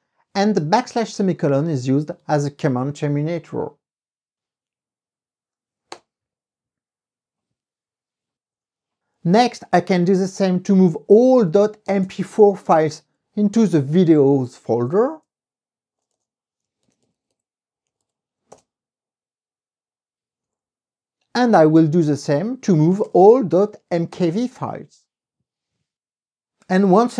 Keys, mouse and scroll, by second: 6.1 KP_Enter, 8.7 Up, 9.1 Left, 11.3-12.7 typing, 13.3 Right, 14.8 Right, 15.3 BackSpace, 16.7-18.6 typing, 18.7 Return, 20.6 Up, 20.7 Left, 23.1 BackSpace, 23.4 k, 23.7 v, 24.3 KP_Enter.